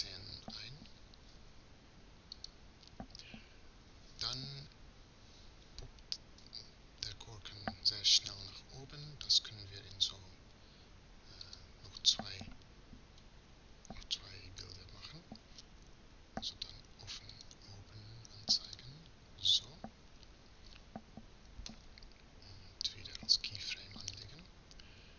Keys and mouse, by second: 18.4-22.8 drag, 22.9 i.